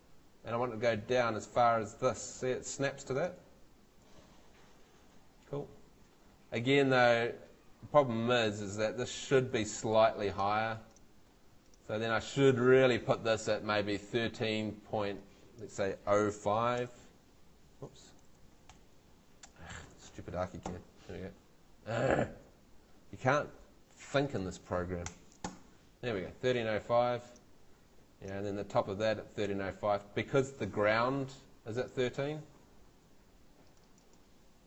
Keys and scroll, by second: 16.3-17.5 typing, 18.7 BackSpace, 19.9 Right, 20.6 5, 25.0 BackSpace, 25.5 5, 29.0 Escape, 34.5-34.6 typing.